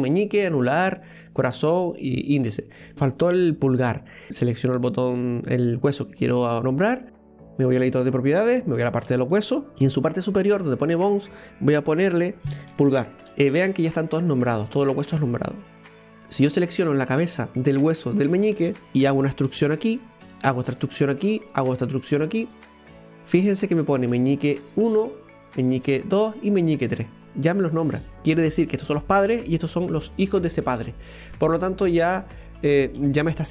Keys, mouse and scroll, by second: 0.8 right click, 1.6 right click, 2.3 right click, 4.1 right click, 9.1 click, 10.0-13.0 drag, 15.9 scroll down 1, 16.1 right click, 19.5 e, 20.6 e, 21.6 e, 23.4-25.8 scroll up 3, 25.8-28.1 scroll down 1, 32.1 right click, 33.0 g.